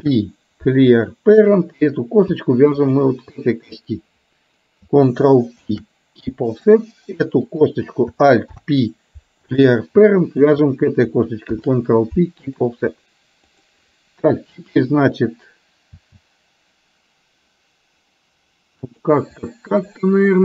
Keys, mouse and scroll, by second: 2.8 shift+click, 5.6 ctrl+p, 7.5 click, 8.6 alt+p, 10.6 shift+click, 11.5 ctrl+p, 13.5 click, 16.0 e, 19.6 middle click.